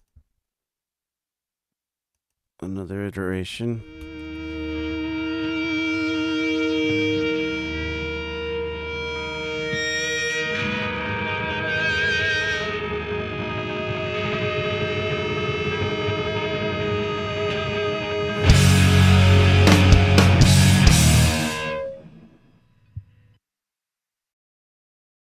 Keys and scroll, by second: 3.2 BackSpace, 3.8 9, 3.9 Return.